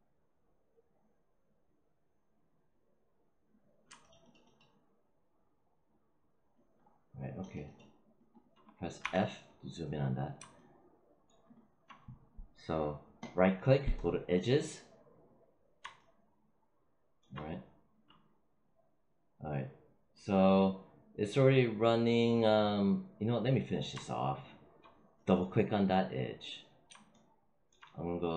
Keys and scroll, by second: 8.9 f.